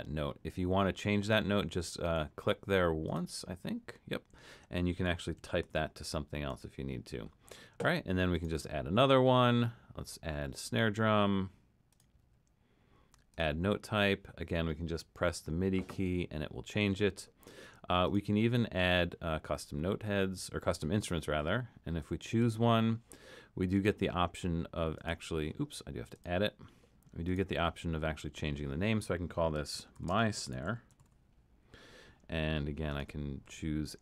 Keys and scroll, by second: 5.2-6.1 typing, 29.5-31.5 typing.